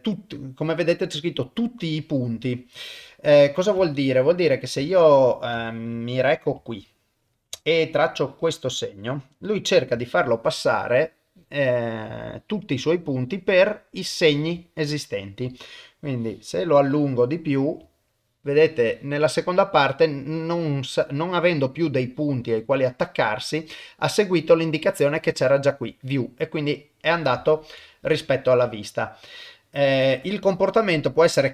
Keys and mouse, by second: 3.1 middle click, 3.9 shift+middle click, 4.8 ctrl+middle click, 5.6 shift+middle click, 5.9 middle click, 6.7 shift+middle click, 8.0 click, 9.3 middle click, 10.1 shift+middle click, 10.2 shift+click, 10.3 shift+middle click, 10.5 shift+middle click, 11.8 shift+middle click, 13.4 middle click, 14.2 ctrl+middle click, 14.6 shift+middle click, 16.1 click, 17.2 middle click, 18.0 shift+middle click, 19.4 middle click, 26.2-27.2 middle drag, 27.5 ctrl+middle click, 27.9 shift+middle click, 28.7 middle click.